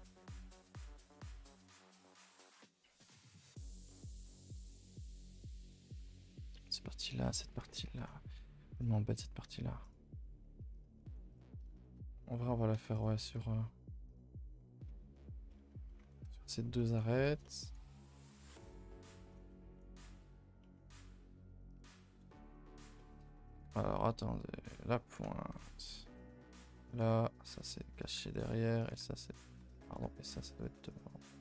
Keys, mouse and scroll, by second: 0.4-2.1 shift+middle drag, 2.1 KP_0, 11.3 click, 11.7 click, 12.9 click, 15.4 middle click, 15.9-17.2 scroll up 9, 16.0 2, 16.3 shift+middle click, 16.7 middle click, 17.2 shift+middle click, 17.7-18.2 scroll down 1, 18.2 click, 18.5 shift+click, 18.7-20.9 middle drag, 20.9 e, 22.2 KP_0, 25.8 click, 26.8 click, 28.0 click, 28.8 click, 29.8 click, 31.3 click.